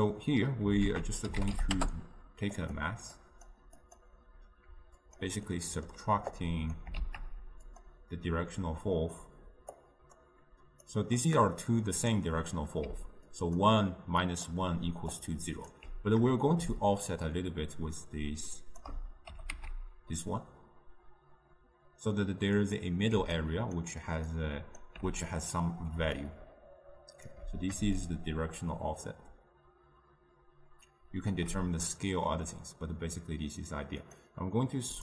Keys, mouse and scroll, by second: 0.2-1.9 drag, 1.9 ctrl+a, 5.5 click, 5.6-7.1 middle drag, 7.1 shift+d, 9.5-19.7 drag, 19.7 g, 23.5-26.3 drag, 26.3-28.4 right drag, 28.4-31.3 shift+drag, 34.3 click.